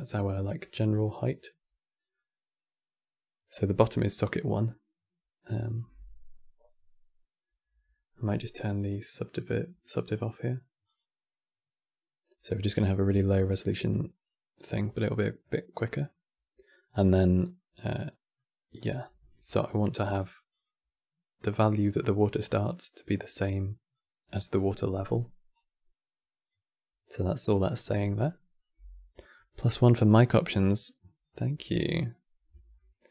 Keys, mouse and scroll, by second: 0.7-1.1 scroll down 3, 8.3 click, 11.6 click, 13.1-13.8 middle drag, 13.8-14.3 scroll down 1, 14.3-18.6 middle drag, 18.6-19.1 scroll up 5, 19.2 q, 21.3 click, 22.7 click, 25.2-28.4 drag, 32.5-33.1 middle drag.